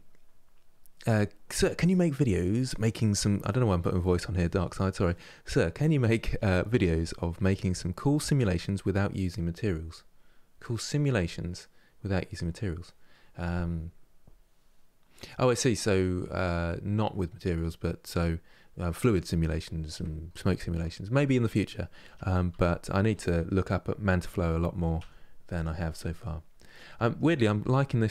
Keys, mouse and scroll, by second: 22.2 Tab, 22.8 g, 25.5 middle click, 26.1 scroll down 1, 26.6 middle click, 27.5 s.